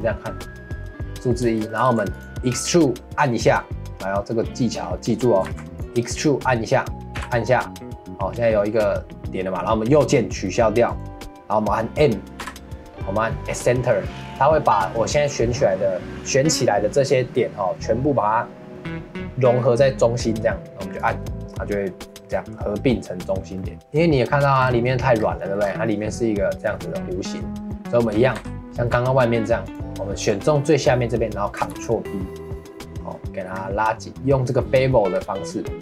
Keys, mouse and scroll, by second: 0.0-1.8 middle drag, 1.8 ctrl+s, 5.4 ctrl+s, 7.2 e, 12.4 m, 22.3-24.6 middle drag, 24.6 scroll down 2, 24.8 middle click, 25.2 scroll down 1, 25.4 middle click, 25.6 scroll up 1, 25.8-28.4 middle drag, 28.4 2, 29.6-31.7 alt+drag, 31.7 ctrl+b.